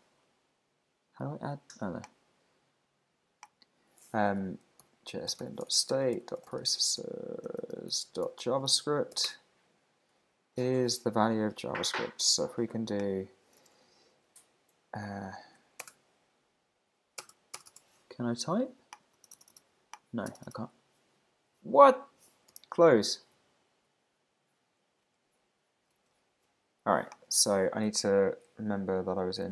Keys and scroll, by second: 9.3 Return, 22.5 super+w, 23.3 super+`, 25.0 super+Tab, 25.9 shift+super+Tab, 27.3 super+t.